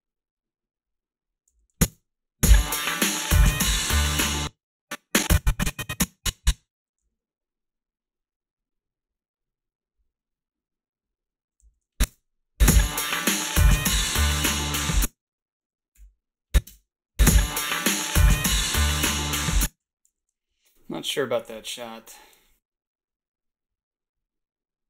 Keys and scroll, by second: 1.5 a, 1.8 space, 4.2 space, 7.0 s, 11.6 a, 12.0 space, 14.7 space, 14.9 a, 15.9 ,, 16.7 space, 19.4 space, 19.8 h, 20.1 a.